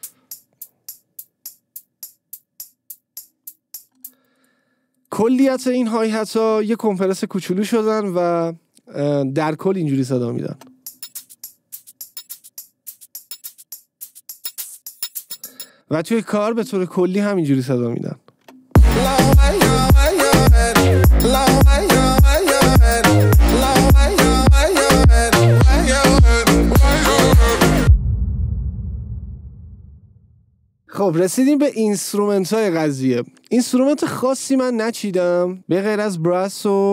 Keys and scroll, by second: 4.3 space, 10.9 space, 18.8 space.